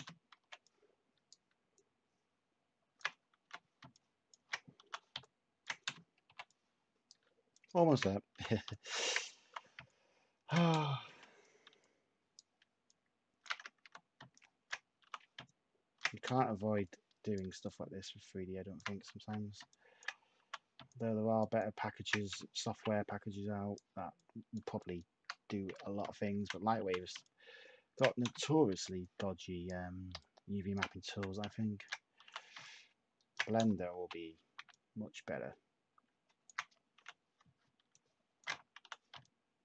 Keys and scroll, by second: 3.4 h, 4.8 t, 5.8 /, 8.3 h, 9.4 t, 10.6 /, 13.8 h, 15.0 t, 16.2 /, 19.1 h, 20.4 t, 22.2 /, 25.6 h, 26.8 t, 28.2 /, 31.0 h, 32.2 t, 33.5 /, 36.9 h, 38.8 t.